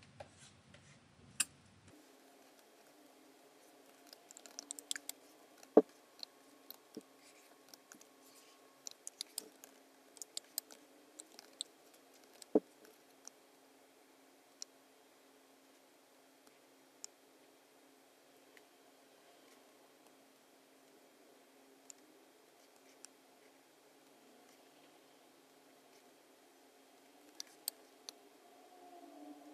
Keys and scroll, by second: 4.1 BackSpace, 4.4 super+=, 4.9 space, 5.6 BackSpace, 6.7 BackSpace, 8.8 BackSpace, 9.2 space, 9.6 super+-, 10.4 space, 11.4 super+=, 12.5 alt+v, 27.4 space.